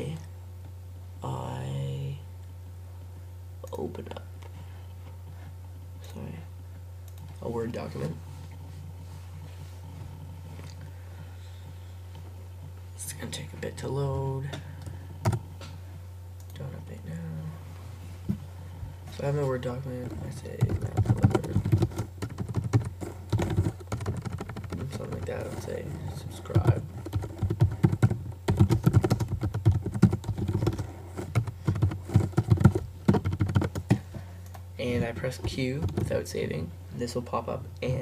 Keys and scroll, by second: 20.4-24.7 typing, 26.9-31.2 typing, 33.1 shift+1, 33.3 shift+1, 33.5 shift+1, 33.6 shift+1, 35.9 super+q.